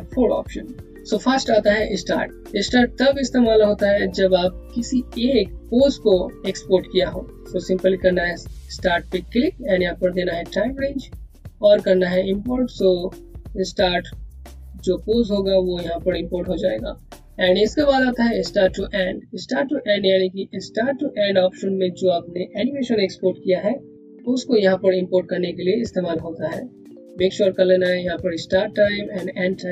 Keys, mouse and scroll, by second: 8.1 click, 18.0 click, 27.6 click.